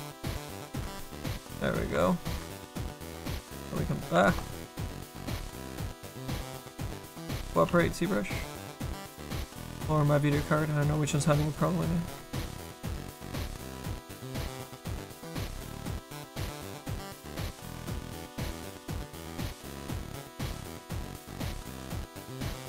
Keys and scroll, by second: 7.7 s.